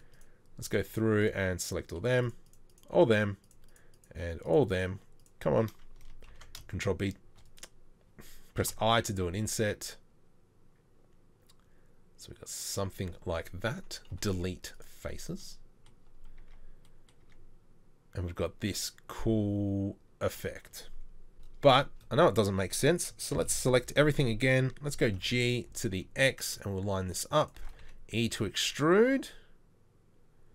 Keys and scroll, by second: 6.3 ctrl+b, 8.6 ctrl+b, 8.6 i, 14.1 Delete, 16.4 Tab, 17.2 Tab, 21.3 KP_7, 23.3 ctrl+l, 23.9 a, 25.1 g, 27.8 g, 28.5 e.